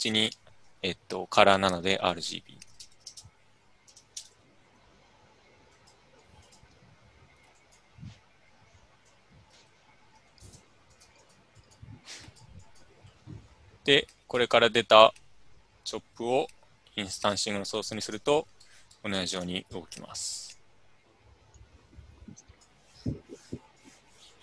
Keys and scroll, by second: 4.3-7.0 typing, 11.9 Tab, 12.4 n, 14.5 typing.